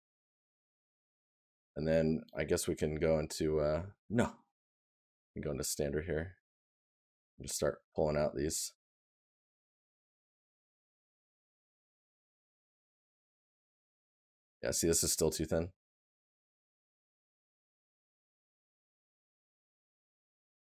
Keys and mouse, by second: 12.9 right click.